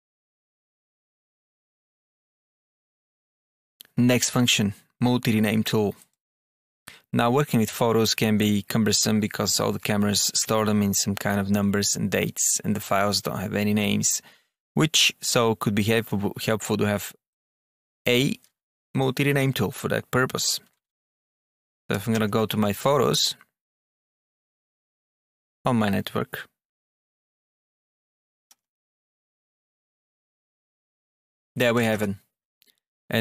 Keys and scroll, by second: 20.6 alt+F1, 21.3 Down, 21.8 Up, 22.0 Return, 22.5 Down, 26.5 Down, 28.4 Return, 29.0 Down, 30.1 Return, 30.6 Down, 31.5 Up.